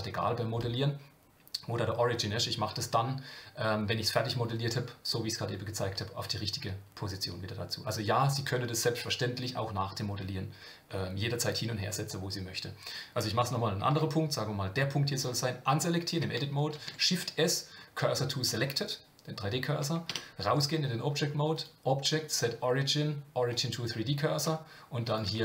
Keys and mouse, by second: 13.9 Tab, 15.1 click, 16.7 shift+s, 20.1 Tab, 21.6-23.6 drag, 25.2 click.